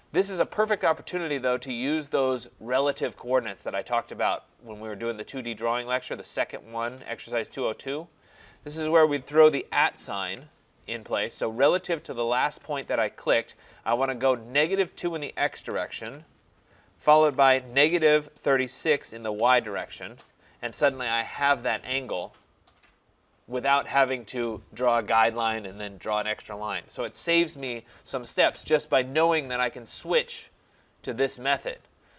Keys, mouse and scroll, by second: 9.3-10.2 scroll, 10.2 @, 15.7-19.4 typing.